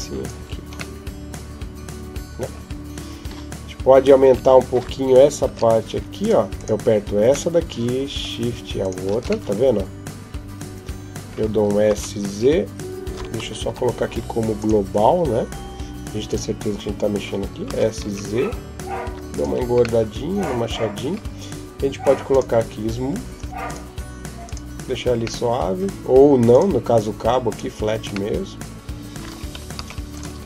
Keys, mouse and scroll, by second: 0.2 Tab, 0.8 middle click, 4.1 Tab, 5.3 ctrl+Tab, 6.4 right click, 7.3 middle click, 8.7 shift+right click, 9.3 middle click, 11.7 s, 13.5 Escape, 14.4 click, 17.5 s, 19.3 Tab, 19.8 middle click, 22.1 click, 23.5 right click, 24.2 click, 25.2 middle click, 26.3 click, 27.3 click, 28.1 middle click, 29.6 ctrl+s.